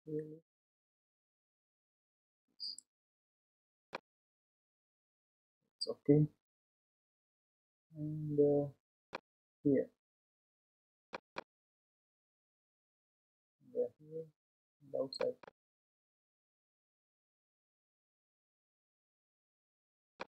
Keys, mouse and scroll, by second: 3.9-6.9 middle drag, 11.3-18.5 drag, 20.1-20.3 middle drag.